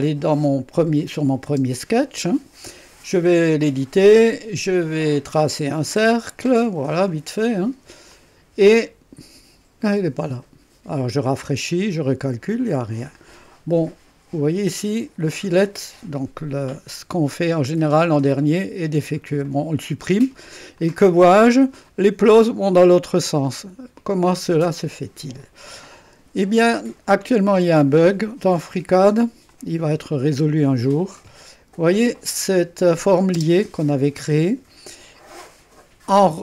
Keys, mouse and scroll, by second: 0.0 click, 1.0 click, 1.5 space, 3.6 click, 5.4 click, 6.4 click, 7.1 click, 8.1 click, 11.4 click, 12.5 click, 15.3 click, 19.3 Delete, 20.7-23.1 drag, 23.5-27.6 drag, 29.4-31.8 drag, 32.1-33.3 drag, 33.3 space.